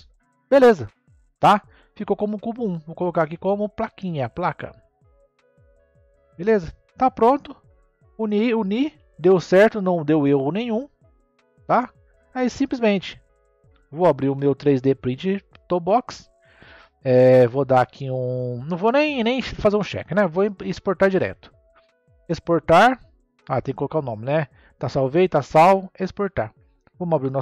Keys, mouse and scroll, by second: 1.5 click, 3.0 click, 3.2-6.2 drag, 8.8 n, 9.3-12.3 middle drag, 12.3-12.8 scroll down 1, 12.8-14.2 middle drag, 14.2 n, 15.4 click, 21.1-27.4 drag.